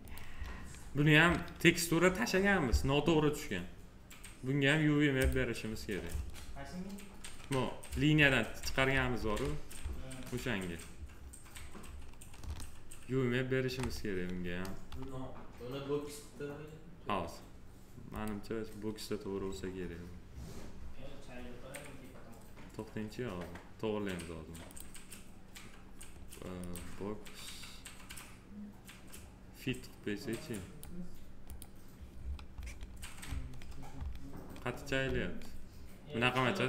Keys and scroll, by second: 8.7 alt+w.